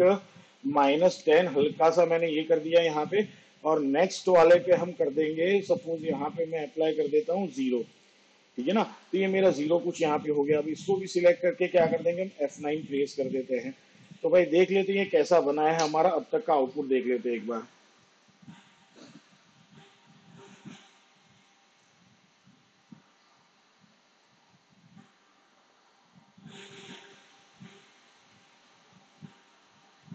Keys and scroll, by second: 1.1 1, 9.0 0, 12.5 F9, 16.1 space.